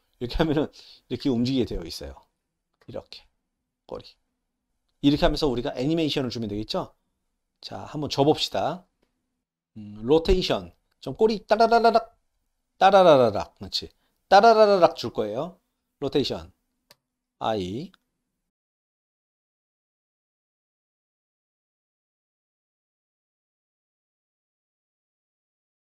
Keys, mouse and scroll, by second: 1.7-2.3 middle drag, 7.5 click, 9.4 n, 16.9 i, 18.5 click, 18.8 click, 19.5 click, 19.9 click, 20.2 middle drag, 20.6 click, 20.8 click, 21.3 i, 21.5 click, 21.8 click, 22.3 i, 22.5 alt+middle click, 22.9 shift+middle click, 24.5 shift+middle click, 24.7 shift+middle click, 24.8 click, 24.9 ctrl+c, 25.0 click, 25.1 ctrl+v, 25.4 click, 25.6 click, 25.6 ctrl+c, 25.7 ctrl+v, 25.8 drag.